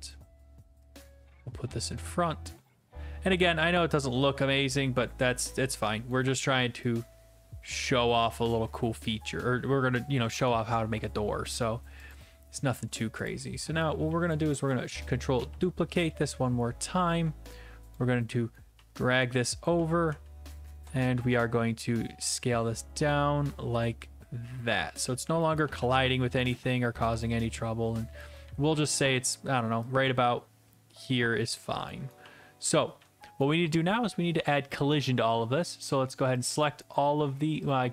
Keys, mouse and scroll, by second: 0.1 click, 1.9 click, 2.2-5.6 typing, 6.1 right click, 6.7-8.1 right drag, 6.7 typing, 8.1 click, 8.5-10.9 typing, 11.6 right click, 12.1 click, 13.3 click, 14.1 a, 14.3 right click, 15.4 ctrl+d, 17.9 click, 18.8-20.2 typing, 19.6 right click, 22.3 ctrl+click, 25.4 click, 25.4-27.0 typing, 26.4 middle click, 28.2 click, 28.4-29.2 a, 29.2 right click, 31.9 click, 32.0-33.5 typing, 33.4 right click, 35.8 click, 36.5 shift+click, 36.9 right click, 37.7 click.